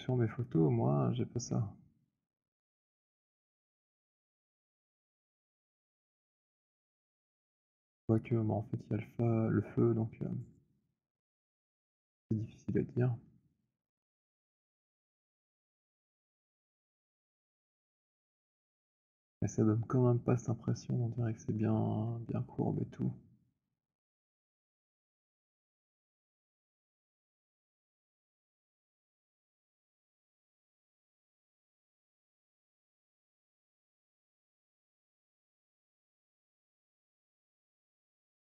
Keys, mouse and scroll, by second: 0.4 click, 2.9 click, 14.5 click, 17.4 click, 25.6 click, 29.7 click, 31.4-36.3 drag, 37.5 click.